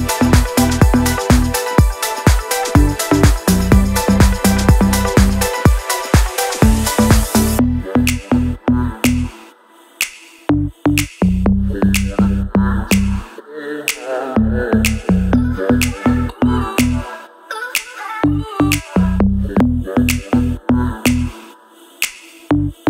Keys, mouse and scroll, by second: 3.6 click, 7.0 click, 8.7-9.4 scroll up 1, 10.4 click, 11.4 t, 11.8 click, 13.0 Caps_Lock, 13.4-15.6 typing, 15.9-16.8 click, 17.8-19.5 scroll up 1, 19.5-20.3 click, 21.1-21.8 scroll up 1.